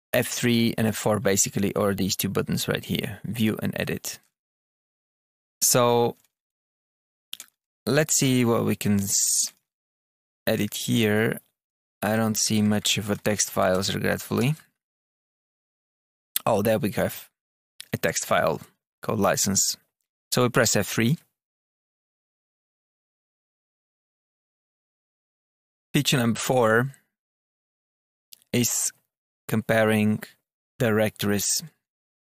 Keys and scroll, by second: 4.6 Down, 5.6 Return, 6.4 Return, 6.4 Up, 7.1 Down, 7.3 Return, 8.9 Return, 9.2 Down, 10.4 Down, 11.6 Page_Up, 11.9 Return, 12.2 Page_Down, 13.0 Page_Up, 13.6 Page_Up, 13.6 Return, 14.2 Page_Up, 14.3 Return, 14.7 Down, 15.0 Return, 15.5 Down, 15.8 Return, 16.4 Down, 17.6 Down.